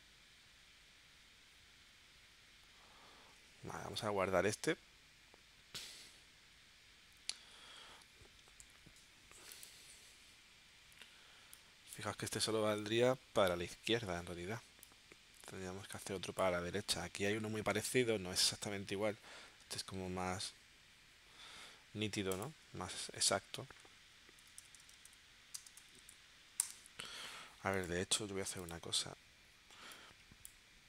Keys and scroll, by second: 8.6 v, 24.1-25.7 typing, 26.6 Return.